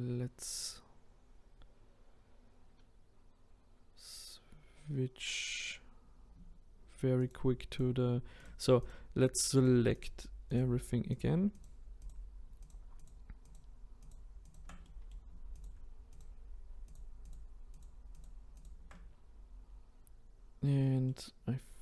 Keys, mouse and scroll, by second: 7.3 shift+click, 7.8 shift+click, 9.6 shift+click, 10.6 shift+click, 12.1 shift+click, 12.7 shift+click, 14.9 middle click, 15.6 shift+click, 16.2 shift+click, 17.8 shift+click, 18.6 shift+click, 21.1-21.8 middle drag.